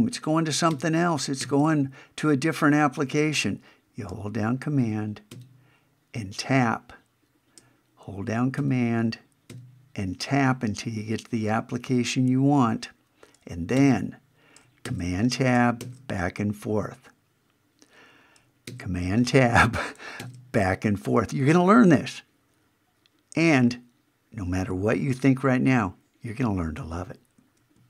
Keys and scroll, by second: 0.7 super+Tab, 5.3 super+Tab, 8.6 super+Tab, 13.8 super+Tab, 14.8 super+Tab, 15.8 super+Tab, 18.7 super+Tab, 20.2 super+Tab.